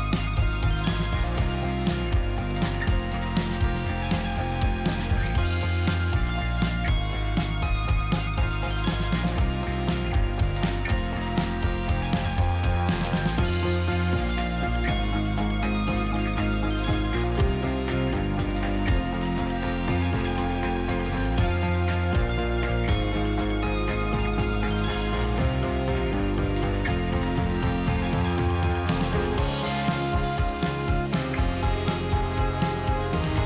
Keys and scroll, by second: 0.7 space, 1.0 2, 3.1 shift+a, 4.0 z, 4.9 q, 6.4-8.9 typing, 11.1 q, 12.4 2, 14.4 2, 16.7 1, 17.5 space, 19.2 x, 20.0 space, 20.9 z, 22.7 z, 24.0 q, 24.3 d, 24.9 space, 32.5 s.